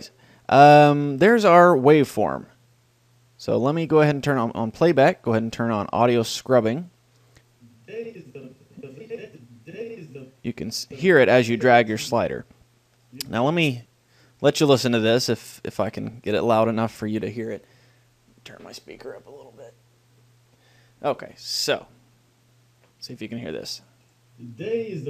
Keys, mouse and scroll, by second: 2.5-4.1 drag, 4.5-6.8 drag, 7.8-9.6 drag, 11.1-16.4 drag, 23.7-25.0 drag.